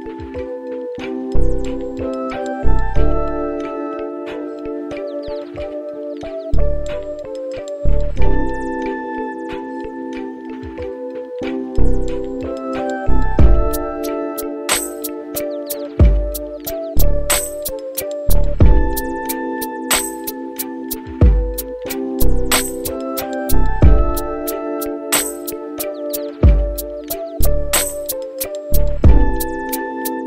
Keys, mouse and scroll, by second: 6.6 click, 8.5 shift+d, 13.3-14.1 scroll up 9, 14.0 middle click, 14.6-15.5 scroll up 1, 17.3-26.5 drag.